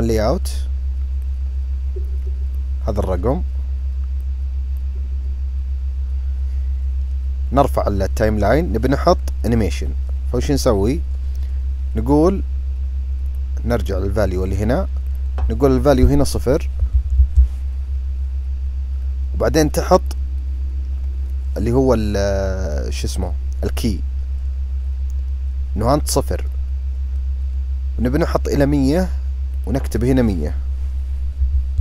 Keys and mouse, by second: 1.2-2.6 drag, 4.2 click, 13.3 click, 15.2-18.7 drag, 20.0 click, 26.5-28.7 drag, 29.6-31.8 drag.